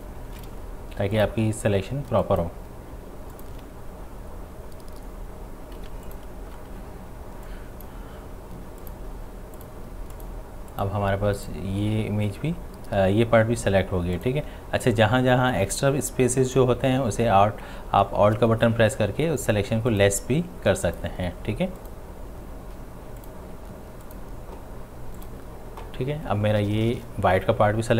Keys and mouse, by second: 2.3 alt+click, 3.4 alt+click, 5.9 space, 6.1-8.8 ctrl+drag, 14.2 alt+click, 16.5 alt+click, 19.9 alt+click.